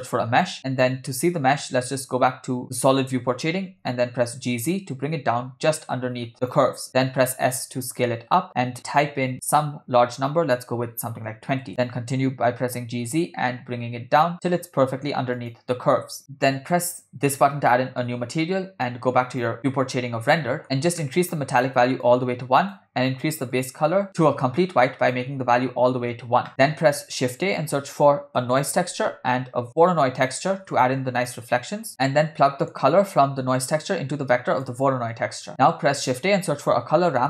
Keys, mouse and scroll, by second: 2.0 click, 3.3 g, 7.0 s, 11.7 g, 17.2-17.7 drag, 20.3 click, 20.4 middle click, 20.6-21.0 scroll down 2, 21.0 middle click, 22.1 click, 23.5 click, 26.5 middle click, 26.8 shift+a, 30.6 shift+a, 32.5 middle click, 33.9-34.8 drag, 35.2 click, 35.7 shift+a.